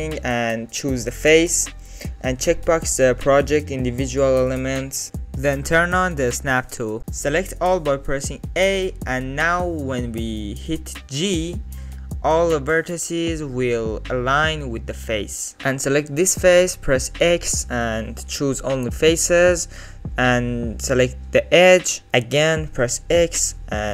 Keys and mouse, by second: 5.5 click, 7.0 a, 9.7 g, 11.0 alt+z, 11.4-13.5 drag, 13.8 alt+z, 13.9 click, 14.4 alt+z, 14.7 click, 15.4 click, 15.7 3, 16.1 click, 17.2 x, 18.6 click, 19.2 2, 20.3 click, 21.8 x, 23.3-23.9 middle drag.